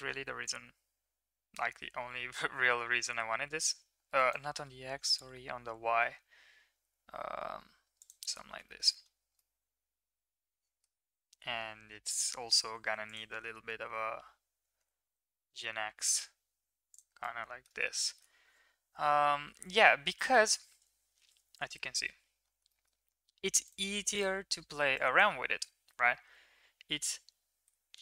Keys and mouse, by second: 4.9 g, 8.6 shift+middle click, 9.4-10.9 middle drag, 11.8 KP_1, 14.6 g, 17.2 middle click, 17.9 shift+middle click, 19.1 KP_1, 21.1 ctrl+KP_3, 22.6 middle click, 24.1 click, 25.1 click, 26.2 s.